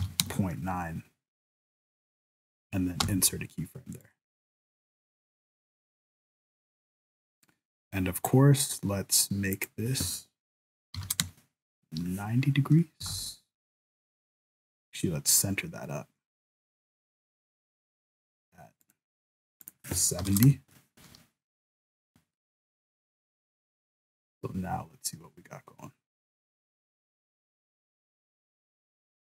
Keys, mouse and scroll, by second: 3.0 i, 4.0 click, 8.2 right click, 9.5 click, 13.0 r, 19.6 click, 22.3 shift+middle click, 24.0 click.